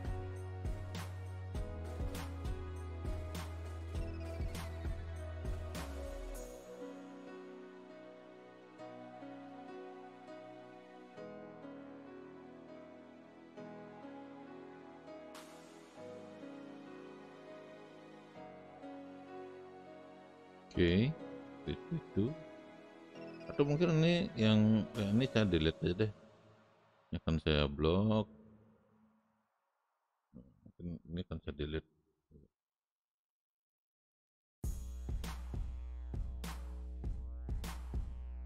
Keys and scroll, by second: 18.0 space, 31.6 Delete, 35.2 Delete.